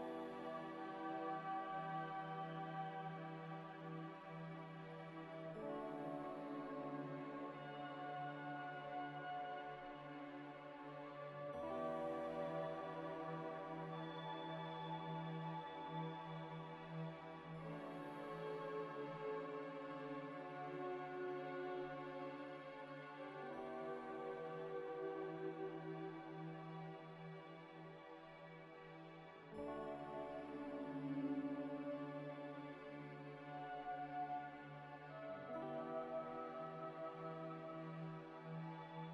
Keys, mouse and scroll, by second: 1.2 Tab, 2.3 Tab, 2.8 middle click, 3.2 z, 3.5 z, 4.9 z, 4.9 scroll up 1, 7.3 middle click, 8.4 g, 8.5 z, 9.3 ctrl+z, 9.5 Tab, 9.8 a, 10.2 u, 12.9 Tab, 13.5 scroll down 1, 13.8 middle click, 15.6 Tab, 16.0 u, 18.7 scroll up 1, 18.9 Tab, 19.9 scroll down 1, 20.0 scroll up 1, 20.4 middle click, 21.4 z, 21.7 scroll down 1, 22.0 z, 22.4 middle click, 23.1 g, 23.2 y, 23.5 x, 25.0 ctrl+x, 25.0 ctrl+z, 26.4 middle click, 28.2 middle click, 29.0-29.4 scroll up 1, 32.3 Tab, 32.8 Tab, 32.8 a, 35.5 scroll down 1, 37.0-37.5 scroll up 1.